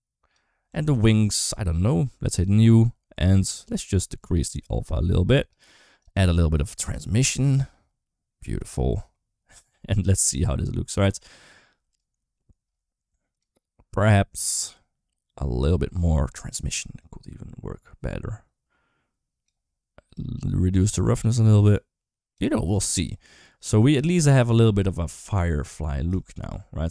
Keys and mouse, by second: 0.5 Tab, 0.8 click, 2.2 click, 4.1-5.4 drag, 5.8 click, 7.2-8.5 drag, 13.1 click, 16.7-19.3 drag, 20.0-22.1 drag, 24.2 click, 24.6-25.0 middle drag, 26.0 shift+middle drag.